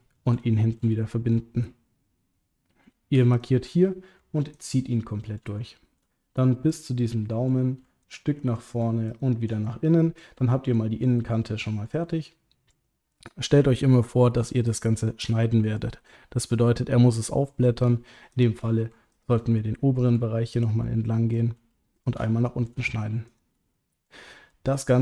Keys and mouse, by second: 0.4 shift+middle click, 1.0 ctrl+middle click, 4.5 ctrl+click, 4.9 middle click, 5.6 shift+middle click, 7.1 middle click, 9.7 middle click, 10.4 ctrl+middle click, 11.2 middle click, 12.1 ctrl+middle click, 13.2 middle click, 14.7 shift+click, 15.3 middle click, 19.6 middle click, 20.9 middle click, 22.2 middle click, 23.2 shift+click, 23.7 middle click, 24.5 middle click.